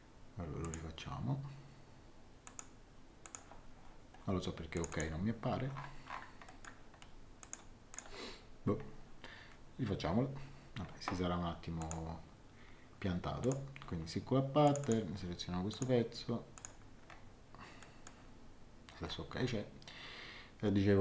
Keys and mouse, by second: 0.6 click, 2.4 click, 4.7 click, 6.4 middle click, 7.4 click, 11.8 click, 13.4 click, 14.6 click, 17.8 middle click.